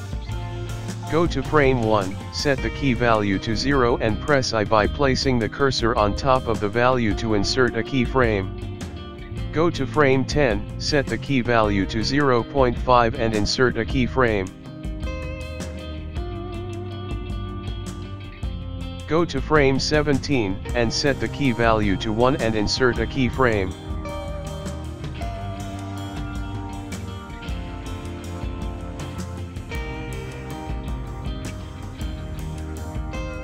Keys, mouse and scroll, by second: 0.0 click, 0.3 click, 2.1 i, 4.8 click, 8.6 click, 15.0 i, 15.6 click, 17.7 click, 22.2 click, 23.7 i, 24.4 click, 25.0 click, 30.9 click.